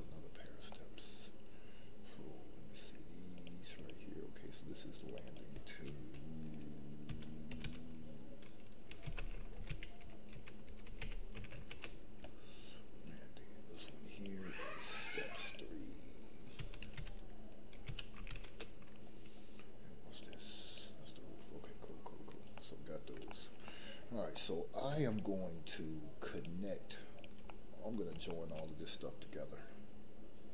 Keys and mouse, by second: 3.3 click, 3.7 click, 5.3-11.7 drag, 13.7 click, 14.1 click, 15.2 click, 15.4-18.4 drag, 20.2 click, 20.6 click, 22.5-23.1 middle drag, 23.3 shift+middle drag, 23.6-24.4 middle drag, 25.1 shift+click, 25.6 shift+click, 27.1 shift+click, 27.5 middle click, 28.3 shift+middle click.